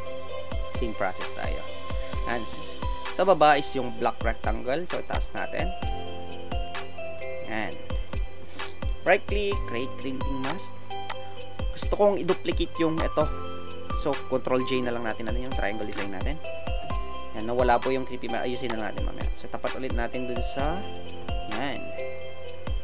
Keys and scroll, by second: 15.8 ctrl+j.